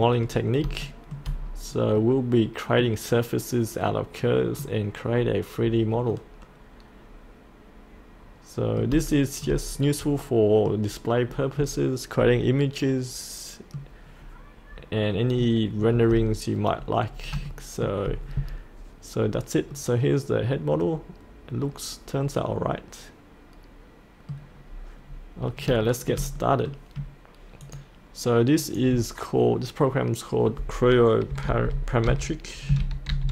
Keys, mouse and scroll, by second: 0.3-0.6 scroll up 1, 0.8 shift+middle click, 1.4-1.9 scroll down 1, 1.9 middle click, 5.0-5.6 scroll down 1, 5.6-6.1 scroll up 1, 6.1-8.9 middle drag, 9.1 shift+middle click, 10.2 middle click, 10.9-12.1 scroll down 1, 12.1-12.8 scroll up 1, 12.8 middle click, 14.0 middle click, 14.1-17.1 scroll down 1, 17.1 scroll up 1, 17.4 shift+middle click, 19.2-19.7 scroll up 1, 19.7-24.1 middle drag, 24.2 middle click, 24.5-25.0 scroll down 1, 25.0-25.6 scroll up 1, 25.8 shift+middle click, 27.6 click, 31.4 shift+m, 33.1-33.3 typing.